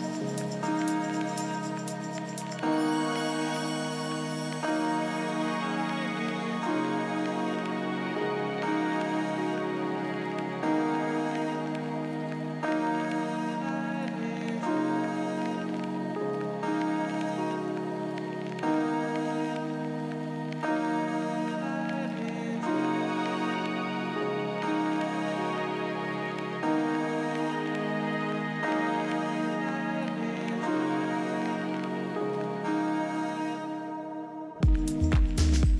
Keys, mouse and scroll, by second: 0.0-1.9 drag, 7.7 KP_3, 14.6 ctrl+KP_1, 19.3-21.2 drag, 23.8-27.5 drag, 32.4 KP_3.